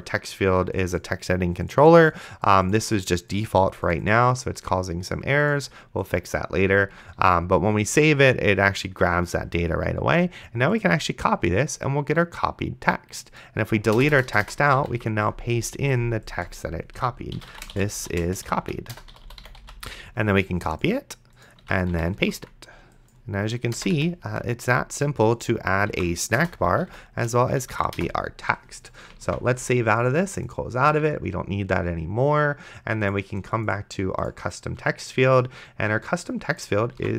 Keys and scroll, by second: 7.4 ctrl+s, 14.2 BackSpace, 15.0 ctrl+v, 17.2-20.1 typing, 21.9 ctrl+a, 22.2 v, 22.5 s, 23.8 BackSpace, 24.2 ctrl+v, 26.2 ctrl+a, 26.4 BackSpace, 27.2 ctrl+v, 27.8 a, 28.0 BackSpace, 29.5 ctrl+s.